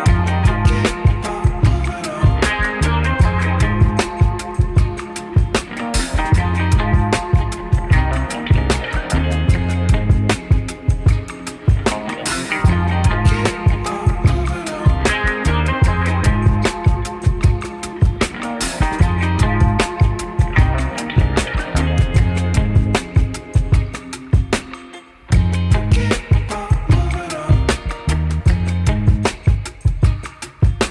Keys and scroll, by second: 6.9 alt+1, 7.0 F3, 7.4 F4, 13.5 0, 13.6 Return, 14.5 F4, 15.0 F4, 15.6 F4, 21.6 1, 21.7 F4, 23.5 2, 23.9 F4, 24.4 alt+F4, 25.1 ctrl+t, 26.7 2, 26.9 F4, 30.1 F4.